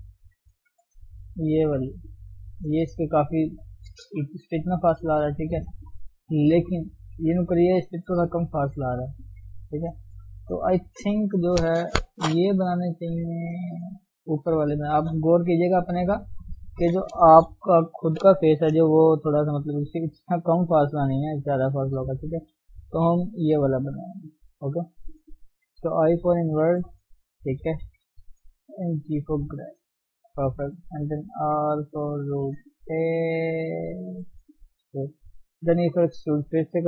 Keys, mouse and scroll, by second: 1.2-2.4 drag, 2.4 shift+z, 4.5-6.4 drag, 6.4 KP_1, 8.8 click, 9.2 d, 9.5-10.2 scroll down 1, 10.2-19.8 right drag, 19.8-20.7 scroll up 2, 20.7 click, 21.2 d, 21.5 click, 21.7 d, 21.9 right click, 22.4 d, 22.9 KP_3, 24.2 shift+middle click, 24.5 scroll up 1, 24.6 Tab, 26.0 i, 27.0 shift+z, 27.8 KP_1, 29.0 g, 30.7 r, 34.7 shift+middle click, 35.6 e.